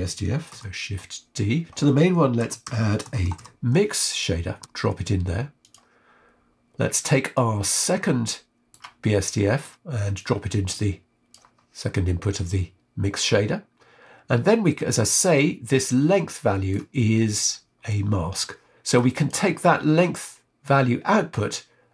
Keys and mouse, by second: 0.5 shift+d, 2.3 shift+a, 4.6 Down, 4.6 BackSpace, 6.9 click, 7.9 middle click, 9.3 click, 10.1 click, 12.5-16.7 middle drag, 17.1 middle click, 17.8 click, 18.8 middle click.